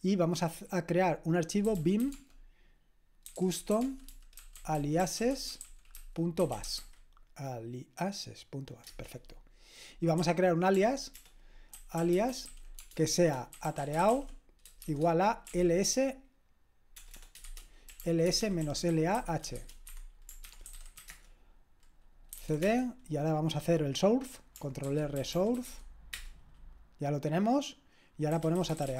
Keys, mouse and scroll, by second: 1.4-7.3 typing, 10.2-22.9 typing, 24.9 ctrl+r, 25.0-26.2 typing, 28.1-28.9 typing.